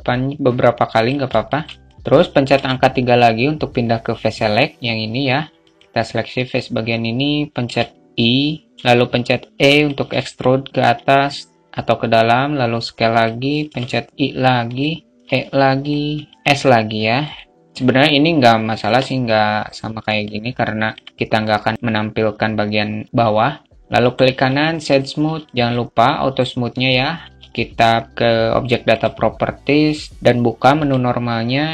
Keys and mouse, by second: 0.9-5.0 alt+shift+middle drag, 5.0-8.3 drag, 8.5 middle click, 9.5-16.3 alt+middle drag, 16.3 s, 16.3 ctrl+z, 19.6-20.7 alt+middle drag, 21.1-21.4 alt+middle drag, 23.8 right click, 24.8-25.2 alt+middle drag, 29.9 click, 31.6 click.